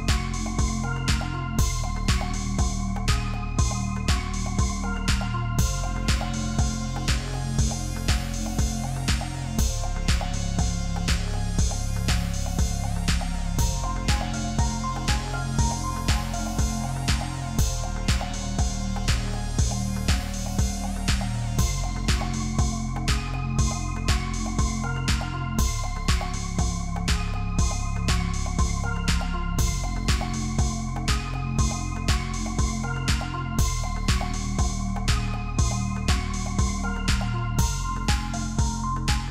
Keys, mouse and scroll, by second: 0.1 ctrl+click, 0.9 ctrl+z, 2.9 ctrl+click, 7.6 ctrl+d, 8.1 space, 8.5-9.0 alt+scroll up 7, 9.7 ctrl+r, 9.9 ctrl+t, 13.5 Return, 14.7 ctrl+click, 17.0 double click, 17.6 alt+scroll down 1, 18.9 typing, 19.5 ctrl+d, 20.4-26.2 typing, 27.9 double click, 32.4-34.1 scroll down 1, 34.1-35.7 scroll up 1, 38.4-39.3 Down.